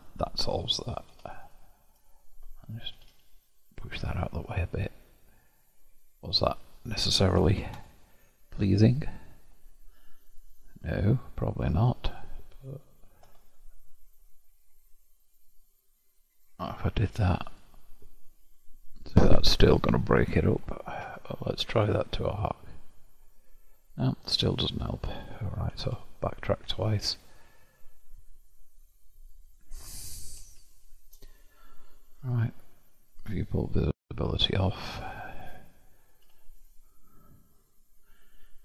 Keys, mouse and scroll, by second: 1.5 click, 3.1 g, 4.6-7.7 middle drag, 7.9 alt+click, 9.1-13.3 alt+drag, 13.3 ctrl+b, 17.7-20.6 drag, 21.1-21.9 scroll down 1, 21.9-24.9 drag, 25.9 ctrl+z, 26.1 ctrl+z, 29.1 middle click, 29.9-30.5 scroll down 1, 30.5-33.3 shift+middle drag, 33.3 click, 34.1-36.0 scroll up 3, 36.0 scroll up 1, 36.2 1.